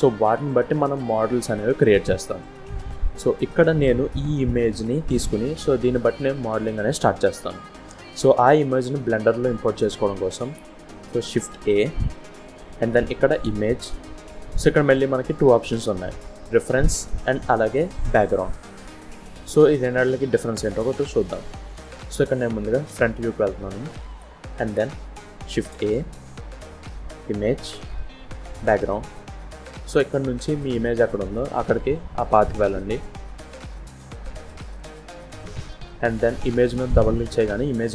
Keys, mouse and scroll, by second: 11.7 shift+a, 22.7 KP_1, 23.6-23.9 scroll up 2, 24.1 shift+middle click, 25.5 shift+a.